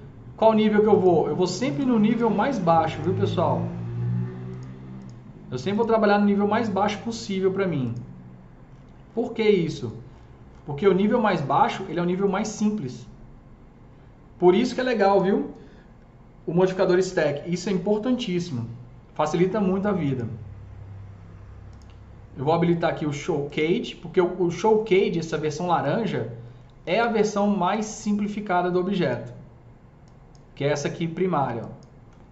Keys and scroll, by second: 26.9 s.